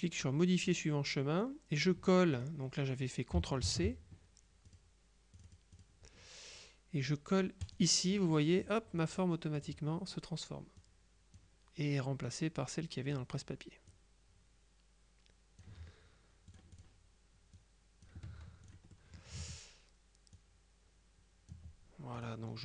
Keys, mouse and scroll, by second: 2.5 click, 3.7 ctrl+c, 4.8 click, 5.5 click, 7.7 click, 9.7 click, 10.9 click, 12.3 click, 13.9-16.2 drag, 16.6 click, 17.7 click, 18.7 click, 19.0 right click, 20.4-22.1 ctrl+drag, 22.2 click.